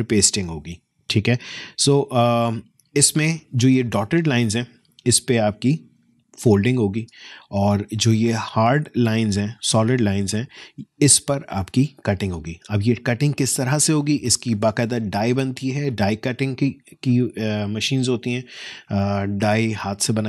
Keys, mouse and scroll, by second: 2.8 alt+scroll up 1, 4.8 space, 5.2 click, 5.3 space, 7.4-8.0 alt+scroll down 1, 11.7 alt+scroll down 1, 12.9 alt+click, 13.2 alt+space.